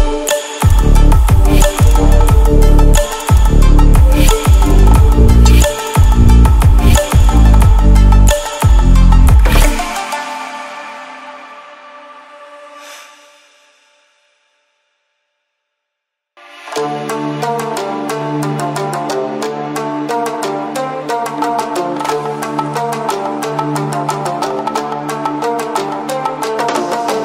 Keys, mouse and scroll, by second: 2.1-2.6 ctrl+alt+scroll down 2, 2.6-3.2 ctrl+alt+scroll up 2, 3.2 click, 4.2 ctrl+alt+scroll down 1, 5.8-6.1 ctrl+alt+scroll up 1, 9.0-14.8 drag, 21.5 ctrl+alt+scroll up 1, 22.5-23.1 drag.